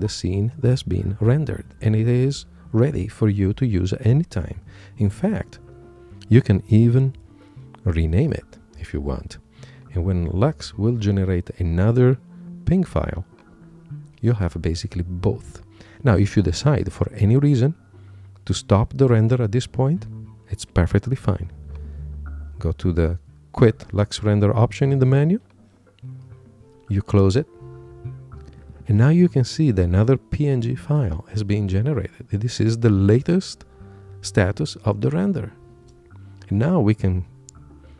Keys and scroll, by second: 5.8 Return, 6.3 Right, 7.9 Return.